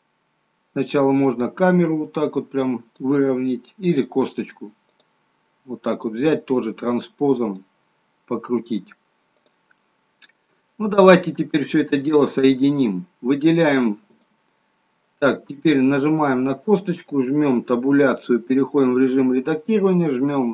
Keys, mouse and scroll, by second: 3.9 click, 7.4 click, 9.4 click, 10.2 scroll down 1, 10.5 shift+middle click, 14.0 click, 16.1 click, 17.6 Tab, 20.0 click.